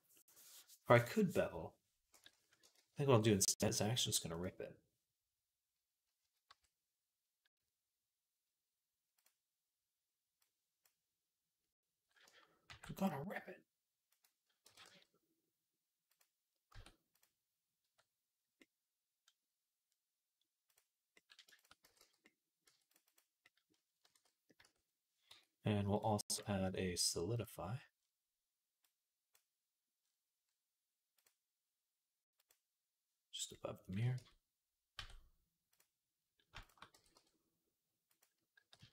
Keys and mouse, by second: 2.6 ctrl+z, 3.9 v, 6.1 a, 6.3 q, 12.5 ctrl+r, 14.5 g, 16.1 middle click, 16.6 Tab, 17.0 click, 17.0-19.7 middle drag, 17.7 Tab, 19.7-22.1 drag, 21.7 x, 22.1 middle click, 22.3 click, 22.4 middle click, 22.5 Tab, 22.7 click, 22.8 middle click, 22.9 click, 23.0-25.8 middle drag, 23.9 ctrl+s, 24.5 Tab, 25.1 Tab, 25.8-29.2 drag, 29.2-31.0 middle drag, 31.0-32.3 drag, 34.0 Tab, 34.8 Tab, 36.5 shift+click, 36.8 g, 37.8-38.9 drag, 38.4 g.